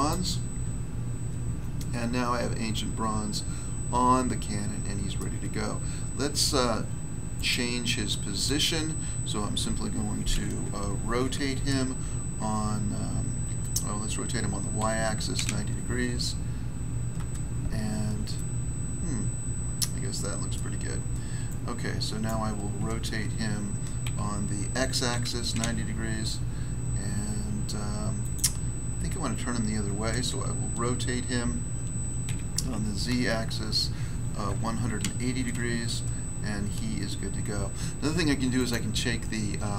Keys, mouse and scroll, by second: 0.0 click, 1.7 middle click, 5.1 middle click, 5.4-7.3 scroll down 1, 7.3 click, 7.3 scroll down 1, 7.4 click, 8.4 click, 8.5 click, 11.1 r, 14.7-15.4 typing, 17.1 Return, 18.3 middle click, 20.5 middle click, 21.4 click, 22.2 click, 24.0 r, 25.0 x, 28.1 click, 28.3 click, 32.2 r, 33.0 z, 34.4-34.9 typing, 35.8 Return, 38.5 click, 38.6 click.